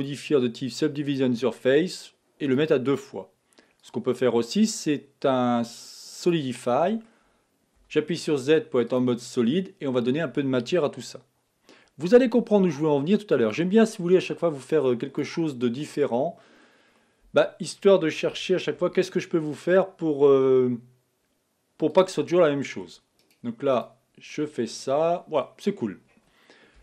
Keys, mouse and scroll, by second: 3.8-6.7 drag, 6.7-7.8 middle drag, 7.8 z, 9.5-10.0 scroll up 2, 13.5-15.6 drag, 15.6 scroll up 1, 15.6 middle click, 16.4-17.0 scroll down 3, 17.0-18.3 middle drag, 18.3 g, 22.3 middle click, 23.2-24.3 right drag, 24.3 middle click, 25.0-25.4 scroll down 2, 25.4-26.7 middle drag, 26.7 KP_1.